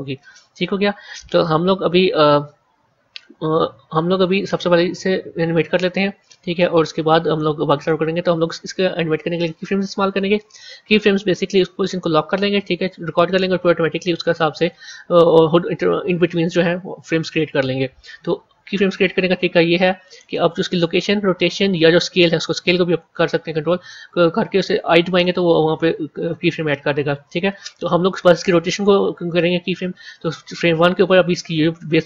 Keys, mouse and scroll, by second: 4.2 click, 7.7 click.